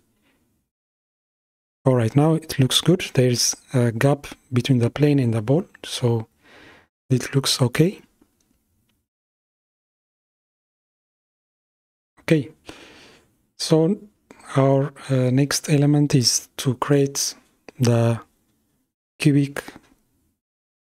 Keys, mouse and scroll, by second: 8.4-9.7 middle drag, 9.7 click, 10.6 click, 11.7 space, 12.5 shift+Left, 14.0 click, 15.0-18.1 middle drag.